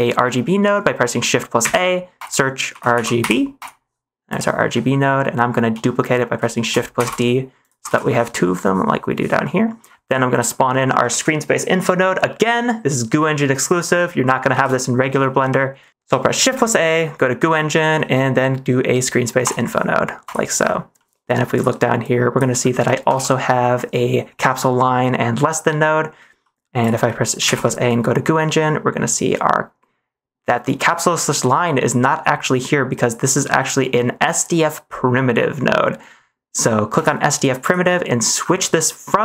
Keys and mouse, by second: 1.5 shift+a, 4.8 middle click, 6.9 shift+d, 7.8 ctrl+s, 8.1 middle click, 9.4 middle click, 10.0 middle click, 10.2 click, 11.1 ctrl+s, 14.4 shift+a, 16.5 shift+a, 21.0 middle click, 21.5 click, 22.1 click, 23.1 ctrl+s, 26.4 middle click, 26.8 drag, 27.0 middle click, 27.5 shift+a.